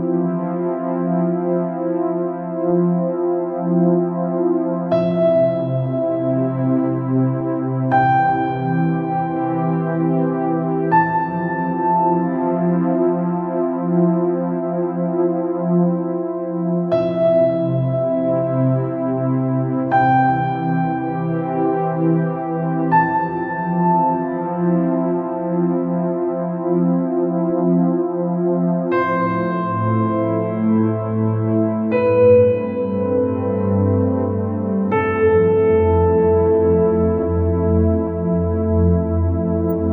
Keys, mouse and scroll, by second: 0.6 click, 2.0 click, 2.7-3.0 scroll up 4, 3.2 scroll down 1, 3.3 middle click, 3.8-4.4 scroll up 4, 4.5 click, 5.3 click, 5.7 scroll down 2, 5.8 middle click, 6.3 scroll up 3, 8.0-9.8 drag, 9.8-10.2 scroll down 3, 10.4 scroll up 2, 11.9-13.5 drag, 13.5 scroll down 4, 13.9-15.9 middle drag, 15.9-16.3 scroll up 4, 17.4 scroll up 1, 17.9 scroll down 2, 18.2-19.5 middle drag, 19.5-20.1 scroll up 2, 20.1 middle click, 21.1 scroll up 2, 22.0-23.5 drag, 23.5-23.8 scroll up 3, 24.4-24.8 scroll down 2, 25.3 alt+scroll up 2, 26.0 alt+click, 27.3 click, 27.8 scroll, 27.9 scroll up 2, 28.4 scroll down 3, 28.6-29.6 middle drag, 29.6 scroll up 2, 30.6 alt+click, 31.5 click, 32.5 alt+click, 33.4 click, 34.1-34.4 scroll down 2, 34.4 scroll up 2, 35.3 click, 37.0 scroll down 2, 37.4-38.0 scroll up 4, 38.3 scroll down 2, 38.8 scroll up 1.